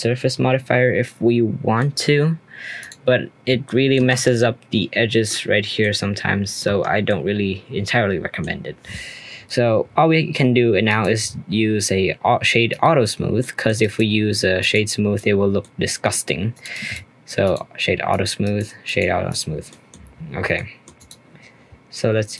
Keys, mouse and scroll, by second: 1.8 middle click, 2.0-2.8 scroll up 2, 2.8 click, 3.1-3.6 scroll up 2, 3.6-4.1 shift+middle drag, 4.1 Tab, 5.8 middle click, 6.6 Tab, 6.9 scroll down 1, 7.0-8.5 middle drag, 8.5-10.8 scroll down 1, 10.8-13.4 right drag, 13.4-13.8 middle drag, 13.8-15.6 right drag, 15.6-16.5 middle drag, 16.5 click, 16.7-18.1 right drag, 18.1 click, 18.4-19.3 right drag, 19.3 click, 19.5 scroll down 1, 19.7-20.1 middle drag, 20.1-20.5 scroll down 4, 20.5-20.9 middle drag, 20.9 click.